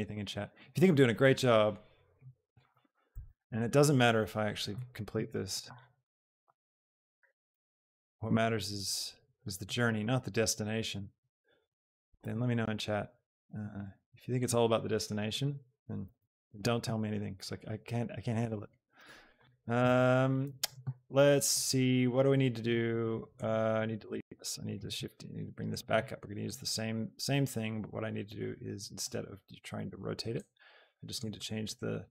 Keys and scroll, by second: 3.0 KP_4, 3.4 Return, 5.2 Return, 7.1 KP_4, 16.2 Return, 23.9 x, 24.7 shift+KP_0, 25.5 KP_0.